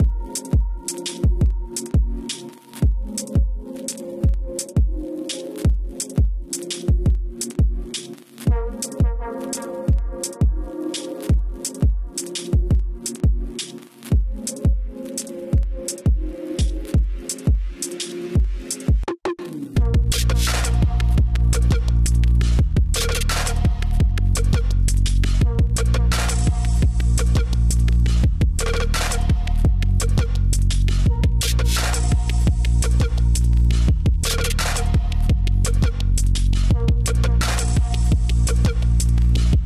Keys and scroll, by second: 7.9 space, 11.3 space, 11.4 space, 12.4-15.2 typing, 13.1 ctrl+z, 16.5 space, 17.3 space, 24.4 space, 37.3 space.